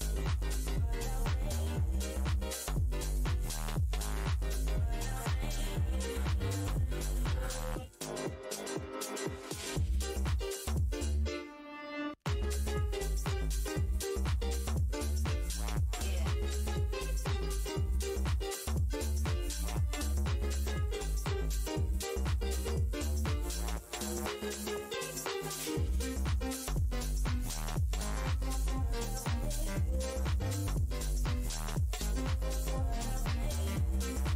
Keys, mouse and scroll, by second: 1.0 r, 4.8 right click, 5.0 click, 6.3 alt+e, 6.3 scroll down 1, 6.6 r, 7.2 click, 9.8 right click, 10.0 click, 10.4 Delete, 11.2 click, 11.4 ctrl+right click, 11.6 ctrl+w, 11.7 scroll down 1, 12.9 Delete, 13.8 alt+click, 13.9 alt+scroll down 1, 14.2-15.1 typing, 16.9 shift+click, 18.0 space, 18.0 shift+d, 18.6 click, 20.9-22.2 typing, 22.9 alt+click, 25.1 space, 25.6 space, 26.0 scroll up 1, 26.6 Delete, 27.8 click, 28.0 Delete, 32.4 scroll.